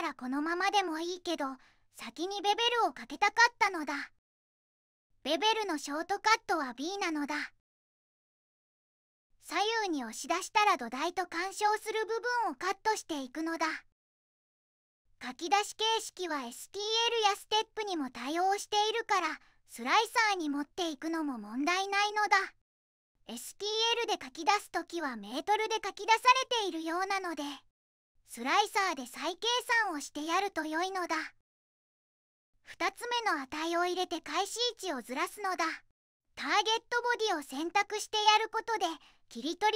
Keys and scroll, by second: 0.0 j, 1.1 j, 3.4 j, 4.5 1, 5.3 b, 7.7 b, 11.4 3, 14.9 -, 15.1 4, 15.2 ., 15.3 5, 15.5 Tab, 15.8 Return, 29.4 3, 34.5 5, 34.7 Tab, 35.9 3, 36.0 Tab.